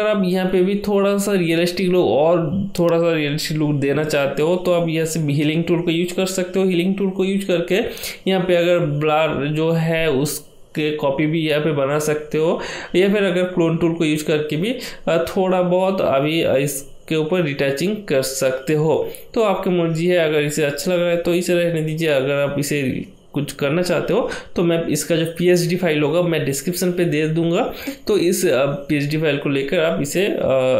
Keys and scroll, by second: 9.9-12.6 typing, 13.3 ctrl+z, 16.9 ctrl+z, 17.2 ctrl+z, 17.2 ctrl+z, 17.7 ], 17.8 ].